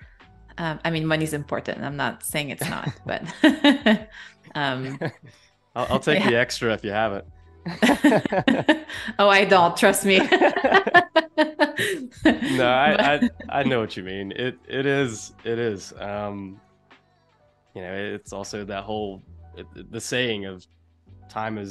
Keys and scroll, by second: 0.7 shift+super+[, 1.9 space, 6.8 p, 14.6 super+z, 16.5 shift+super+[, 17.3 a, 18.5 super+-, 19.4 space, 20.3 super+=, 20.5 space.